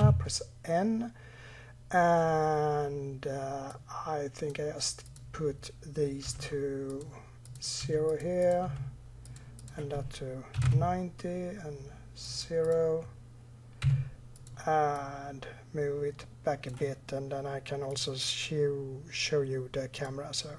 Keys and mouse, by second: 2.0-3.1 middle drag, 3.2 middle click.